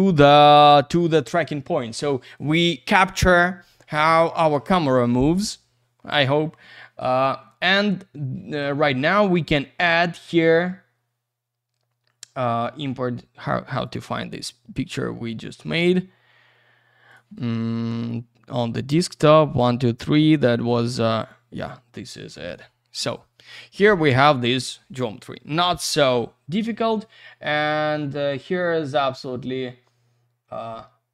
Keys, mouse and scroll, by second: 9.3 right click, 9.4 right click, 13.8 click, 13.9 click, 17.3 click, 18.0 click, 18.0 click, 21.3 click.